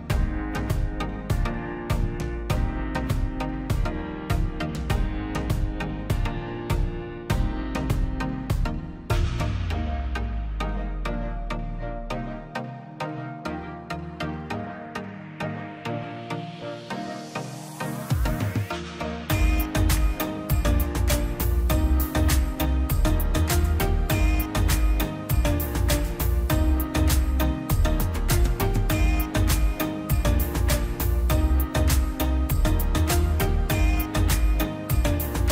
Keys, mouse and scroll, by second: 2.0 scroll down 1, 2.8 middle click, 3.3 scroll down 1, 4.3 l, 4.6 middle click, 5.1 scroll up 1, 6.1 click, 6.2-6.6 scroll down 1, 7.0 click, 7.4 scroll up 1, 8.3 ctrl+z, 8.7 click, 9.2 l, 9.3-9.8 scroll up 1, 10.0 click, 10.1 scroll, 10.9 click, 11.1-11.5 scroll down 1, 12.5 scroll up 1, 13.8 scroll down 1, 14.1 middle click, 14.5 scroll up 1, 15.5 click, 15.7 scroll up 1, 16.0 middle click, 16.4 scroll up 1, 16.8 click, 16.9 scroll down 1, 18.1 middle click, 18.4-18.7 scroll down 1, 19.4 middle click, 20.2-20.5 scroll up 1, 21.4 space, 21.7 click, 22.6 m, 23.9 space, 24.1 click, 24.9 m, 26.8 Escape, 26.9 scroll down 1, 28.3 scroll up 1, 29.3 Escape, 29.7 click, 30.1-30.7 scroll up 2, 30.5 m, 31.3 click, 32.1-32.5 scroll down 1, 33.7 m, 34.4 click, 34.8 scroll up 1.